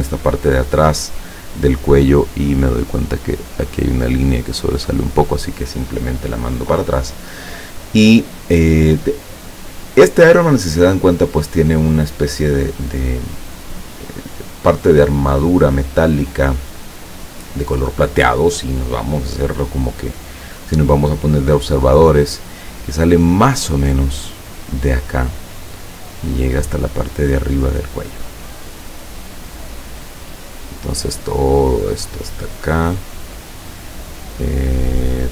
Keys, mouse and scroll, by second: 1.2 click, 2.3-5.0 drag, 20.7 click, 25.6 click, 30.5 click, 32.1 click.